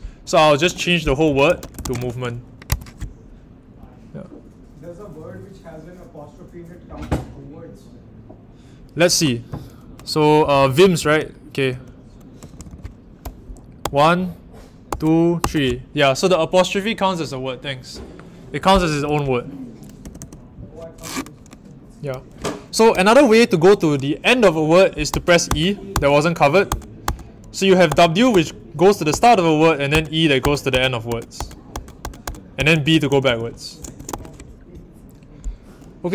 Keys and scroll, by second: 0.6-2.4 typing, 2.6 Escape, 10.1-13.8 typing, 15.3 typing, 20.0 typing, 22.9 e, 25.1-34.0 typing, 34.1 Return.